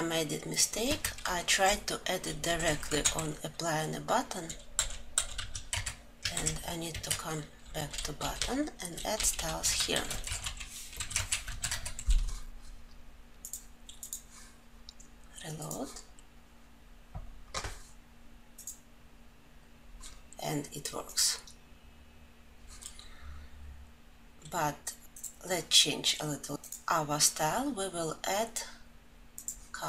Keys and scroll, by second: 6.5 alt+Right, 11.5 ctrl+alt+l.